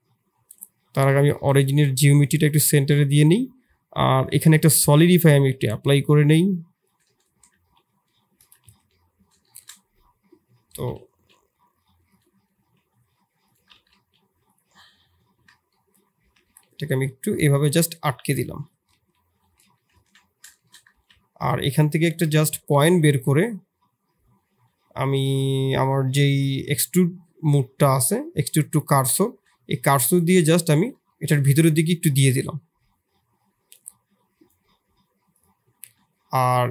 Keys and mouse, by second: 0.8 click, 1.5 g, 5.9-6.9 shift+drag, 7.3 Tab, 7.6 KP_1, 8.6 ctrl+KP_1, 9.4 shift+middle click, 10.6 e, 12.5 s, 13.7 g, 15.7 middle click, 16.1 e, 18.1 s, 18.9 KP_1, 19.6 KP_3, 20.1 ctrl+KP_1, 20.5 shift+click, 20.9 e, 29.2 shift+click, 31.0 shift+middle click, 31.3-32.8 middle drag, 33.7-35.8 drag, 35.8 middle click, 36.4 2.